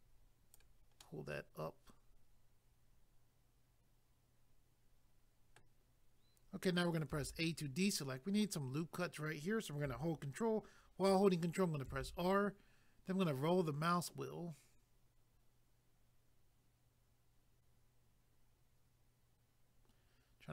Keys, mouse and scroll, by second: 1.0 middle click, 7.1 a, 11.9 ctrl+r, 13.0 scroll up 1, 13.7 scroll up 2.